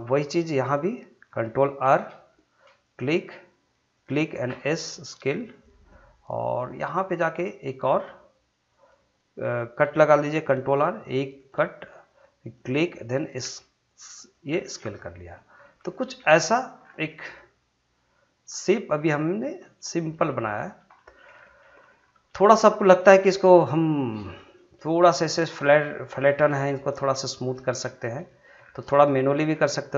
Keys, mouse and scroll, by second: 1.9 ctrl+r, 2.8 click, 4.5 s, 5.5 click, 5.9-8.7 middle drag, 8.7 click, 10.5 ctrl+r, 11.4 click, 13.4 s, 14.2 click, 14.5 scroll down 1, 14.7 middle click, 15.5 scroll up 1, 15.9 shift+middle click, 16.4 middle click, 16.5 scroll down 1, 17.1-20.5 middle drag, 20.5 scroll up 1, 20.9 shift+middle click, 21.3 scroll down 1, 21.6 middle click, 22.1 scroll up 1, 22.3 shift+middle click, 22.6 middle click, 23.0 scroll up 1, 23.3 shift+middle click, 23.9 shift+middle click, 24.6 middle click, 26.2 shift+middle click, 26.6 middle click, 27.9 scroll up 2, 28.3 shift+middle click, 28.6 scroll down 2, 28.9 middle click, 29.5 shift+scroll down 1, 29.7 shift+middle click.